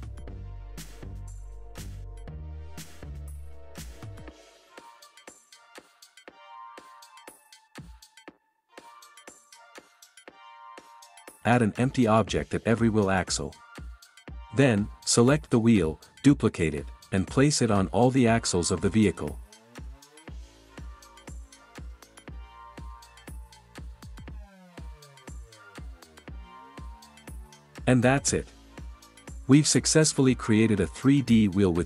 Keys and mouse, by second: 0.9 Tab, 1.8 ctrl+z, 2.2 click, 3.1 click, 3.9 ctrl+j, 5.4 click, 5.9 shift+d, 6.1 click, 6.4 shift+s, 6.9 shift+drag, 7.3 KP_3, 7.5 KP_1, 9.2 click, 9.4 middle click, 9.6-10.3 middle drag, 10.5-13.3 typing, 10.9 middle click, 11.4 click, 13.1 click, 14.4 shift+s, 17.2-20.0 typing, 17.7 drag, 18.2 click, 20.0 KP_Enter, 21.0 click, 21.2 shift+s, 21.6-22.0 drag, 22.2 shift+d, 22.5 shift+s, 23.6 shift+s, 24.4 shift+d, 24.7 shift+s, 25.5 click, 25.7 shift+s, 26.0 drag, 26.3 shift+d, 26.7 shift+s, 26.9 drag, 28.4 ctrl+s.